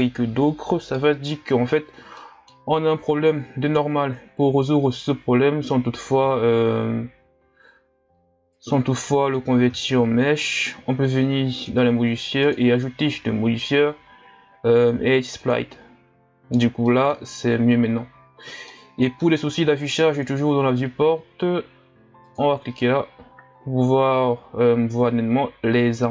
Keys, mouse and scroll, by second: 1.8-2.2 scroll down 2, 2.2-5.2 middle drag, 8.6-9.8 drag, 9.8-11.2 scroll down 3, 11.6 click, 12.5-15.6 drag, 16.3-16.9 scroll down 1, 16.9-17.3 middle drag, 17.3-17.9 scroll up 2, 17.9-18.7 scroll down 2, 18.7-20.2 middle drag, 20.2-23.3 drag, 23.5-26.1 scroll up 5.